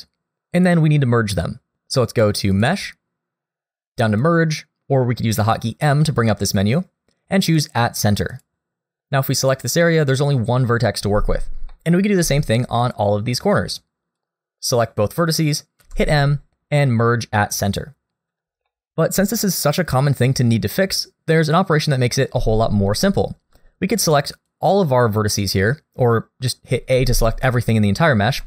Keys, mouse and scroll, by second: 2.5 click, 8.9 click, 8.9 g, 11.7 middle click, 12.4 shift+middle click, 12.8 click, 13.8 click, 15.8 m, 18.7 shift+middle click, 22.9 click, 24.5 click, 26.9 a.